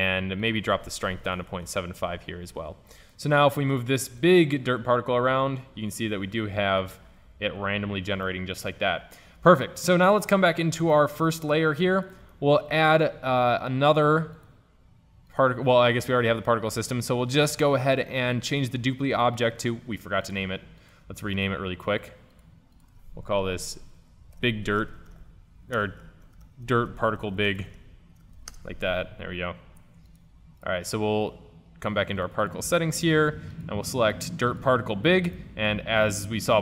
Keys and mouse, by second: 3.3 middle drag, 3.6-6.9 drag, 7.7 ctrl+z, 8.5-9.2 middle drag, 10.5-11.0 drag, 11.0-12.1 middle drag, 12.2-13.7 drag, 13.7-15.4 middle drag, 20.8 click, 22.4-24.6 drag, 22.4-23.3 right drag, 30.1-30.7 drag, 30.7-34.7 middle drag, 35.6-36.6 middle drag.